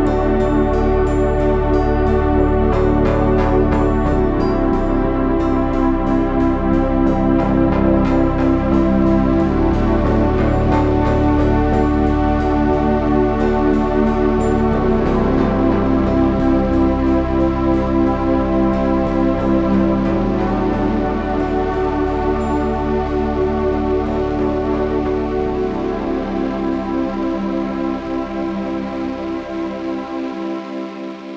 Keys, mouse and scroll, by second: 0.0 a, 0.8 s, 2.6 KP_1, 5.5-7.9 drag, 7.9 right click, 10.7 c, 12.6 Tab, 12.9 z, 13.5 Tab, 13.7 z, 14.0 c, 14.8 e, 21.1 Tab, 26.2 Tab, 31.2 KP_7.